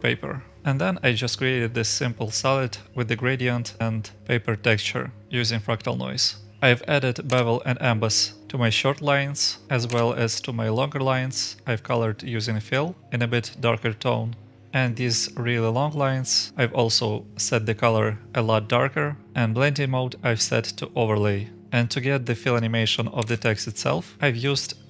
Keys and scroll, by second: 1.1 scroll down 1, 1.8-2.3 scroll down 1, 12.5-13.4 typing, 21.4-22.2 scroll down 1.